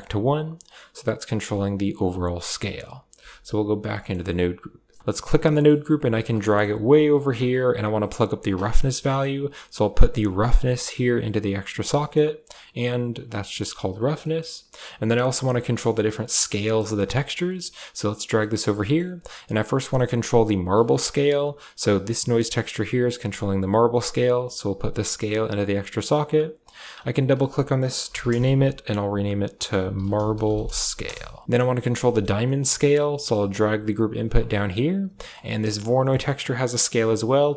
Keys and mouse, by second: 0.6-2.0 drag, 2.6 click, 3.0 Tab, 5.3 click, 5.7 g, 6.4 middle click, 6.6 g, 7.8 click, 8.1 g, 10.4-11.4 drag, 12.0 middle drag, 12.3 click, 13.1 click, 15.5 click, 16.1 click, 16.7 click, 18.0 g, 18.3 click, 18.7 click, 19.7 click, 21.8-23.8 drag, 24.4-25.5 drag, 26.4 click, 26.6-30.9 drag, 32.0 middle click, 32.4 middle click, 32.8 click, 33.0 middle click, 33.4 g, 34.5 middle click, 35.1 middle click, 35.6 click, 35.9 middle click, 36.5 click.